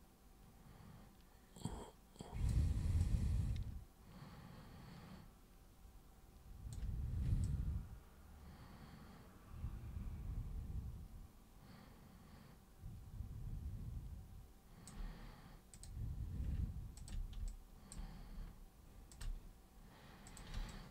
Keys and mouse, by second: 3.0-6.7 alt+super+drag, 7.4-14.9 alt+super+drag, 15.7 super+click, 17.0 ctrl+super+click, 17.5 alt+super+click, 19.1 ctrl+super+click, 20.2 super+click, 20.7 alt+super+click.